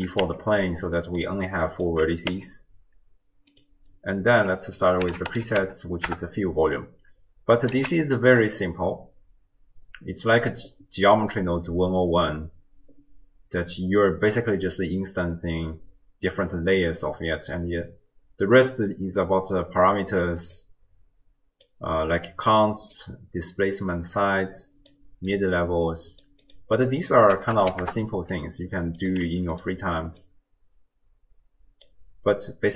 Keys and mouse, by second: 0.2 Tab, 1.0 click, 1.7 click, 2.3 Tab, 3.5-6.2 drag, 6.0 l, 7.8 z, 20.6-21.7 drag, 23.0-24.9 drag, 25.3 click, 26.6-27.9 drag, 29.1 click, 30.2-31.9 drag.